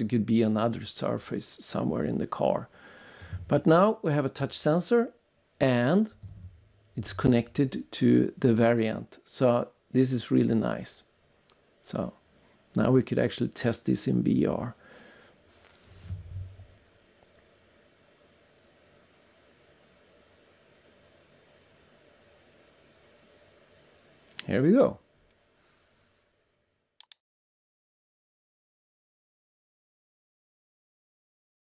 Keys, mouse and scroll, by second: 2.2 click, 3.3 click, 3.3 click, 7.0-8.6 scroll down 2, 8.6 scroll up 3, 8.7 click, 9.3 click, 11.1 shift+right click, 11.7 click, 16.8 click, 17.0 click, 17.2 click, 17.4 click, 18.1 click, 18.7 scroll down 3, 19.0 double click, 19.3 click, 22.4 click.